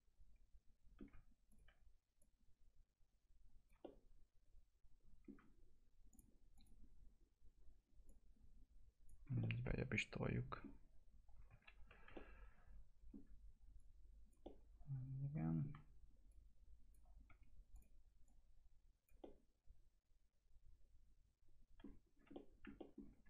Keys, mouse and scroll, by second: 1.5 ctrl+click, 3.8-6.1 alt+middle drag, 6.1 click, 9.1 scroll down 1, 9.4-11.6 alt+middle drag, 11.6 ctrl+z, 12.1-14.4 alt+middle drag, 13.8 click, 14.4-16.3 alt+middle drag, 16.3 click, 17.3 1, 17.7 click, 19.2-22.0 alt+middle drag, 22.0 scroll down 1, 22.3 alt+middle click, 22.8 middle click, 23.0 scroll down 1.